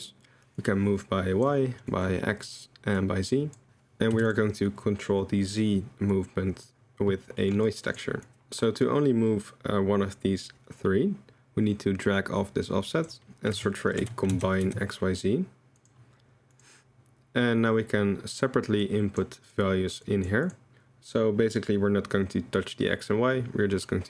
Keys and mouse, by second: 0.7 click, 1.9 click, 3.0 click, 3.7 click, 6.2 click, 7.6-8.0 drag, 8.2 click, 12.0-16.7 drag, 18.8-19.5 drag, 20.0-20.5 drag.